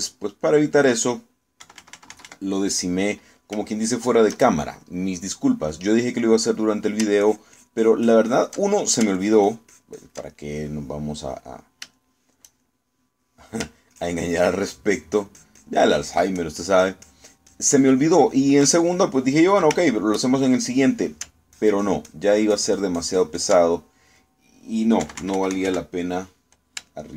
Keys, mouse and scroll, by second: 0.6 ctrl+middle click, 2.7 KP_Subtract, 4.1 middle click, 4.8 shift+middle click, 5.9 middle click, 6.8 middle click, 7.4 middle click, 8.3-9.6 ctrl+drag, 9.6 ctrl+middle click, 10.2-11.3 ctrl+drag, 11.4-12.5 ctrl+middle drag, 12.8 shift+middle click, 13.0-14.4 shift+middle drag, 15.0-19.8 ctrl+drag, 21.0 ctrl+shift+middle click, 22.6-24.7 ctrl+drag, 24.7 ctrl+middle click, 25.6 middle click, 26.1 KP_Subtract.